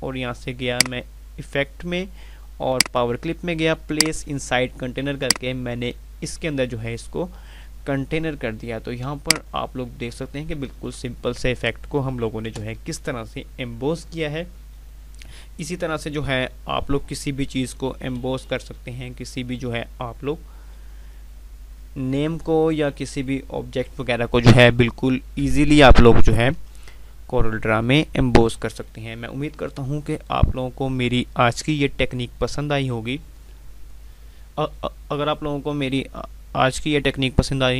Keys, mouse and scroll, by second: 0.7 click, 8.2 F2, 8.9-12.7 drag, 12.4 F9, 18.1 F9.